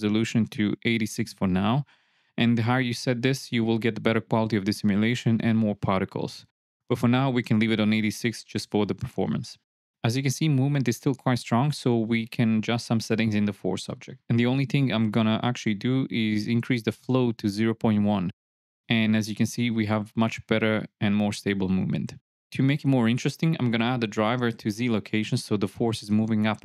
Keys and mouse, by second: 1.6 click, 2.9 space, 3.8 shift+Left, 4.4 space, 5.2 space, 6.0 space, 6.6 shift+drag, 9.6 space, 12.5 space, 17.8 click, 19.2 shift+Left, 19.4 space, 22.1 space, 22.9 n, 23.7-25.9 drag, 25.6 KP_0, 26.4 click.